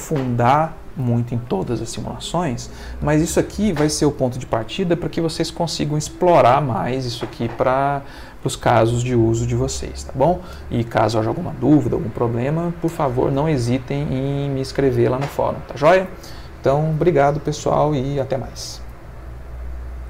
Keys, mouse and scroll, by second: 20.0 click.